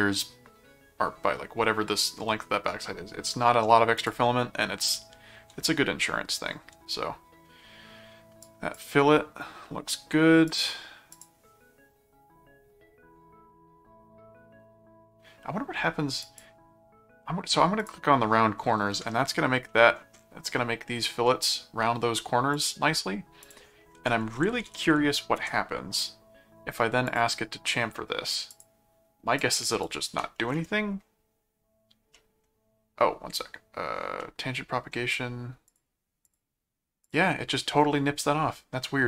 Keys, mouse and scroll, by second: 4.0 click, 8.4 click, 10.4 click, 11.1 click, 16.2 click, 17.8 click, 19.1-20.2 middle drag, 22.5 click, 23.4 click, 23.7-25.3 typing, 25.6 Return, 27.1 click, 28.5 click, 29.4 click, 30.1 2, 32.1 middle click, 34.2 middle click, 35.7 click, 37.0 click.